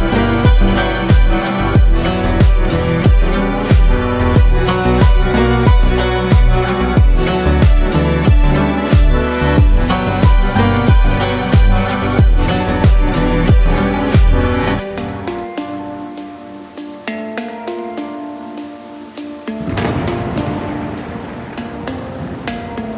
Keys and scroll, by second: 1.4 s, 1.8 z, 7.0 KP_Decimal, 8.4 Tab, 18.5 Tab, 19.6 a, 19.9 a.